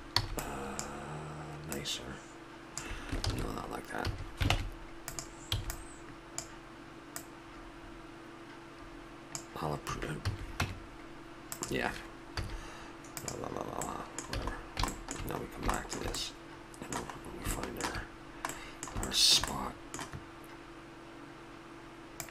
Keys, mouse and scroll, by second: 0.2 b, 1.7-3.3 drag, 3.3 ctrl+z, 4.0 a, 4.5 ctrl+Tab, 5.6 b, 7.2 click, 10.3 a, 10.6 Tab, 12.4 z, 13.9 middle click, 14.4 a, 19.5-22.1 middle drag, 22.2 click.